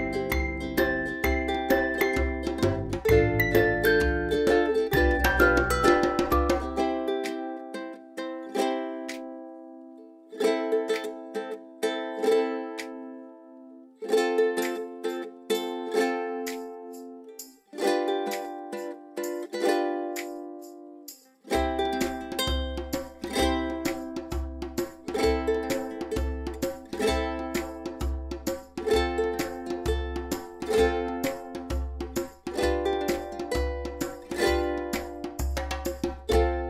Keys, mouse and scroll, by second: 7.9-10.3 typing, 8.0 click, 8.5 scroll down 1, 8.9-9.5 click, 9.7 scroll down 1, 10.0 click, 11.8 v, 11.9 click, 12.2 space, 12.3 click, 12.5 space, 14.3 click, 20.9-23.2 drag, 23.9 v, 24.1 right click, 25.6 click, 26.1 space, 26.2-26.6 click, 26.6 space, 27.0 click, 27.2 space, 27.6 click, 28.2 ctrl+c, 28.5 ctrl+f, 30.9 ctrl+shift+f, 32.1 shift+click, 32.6 right click, 34.7 click.